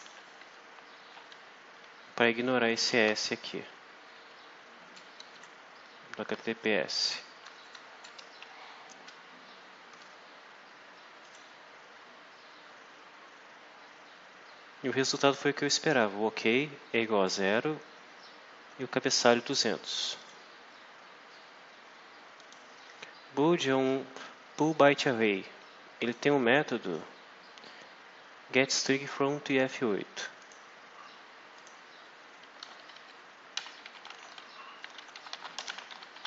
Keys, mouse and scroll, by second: 0.7 Right, 3.0 Left, 6.2 shift+Right, 7.6 Left, 8.3 F5, 11.1 click, 20.1 click, 22.3 click, 25.9 click, 26.8 click, 30.3 click, 31.5 click, 32.6 Left, 32.9 Right, 33.3-36.2 typing.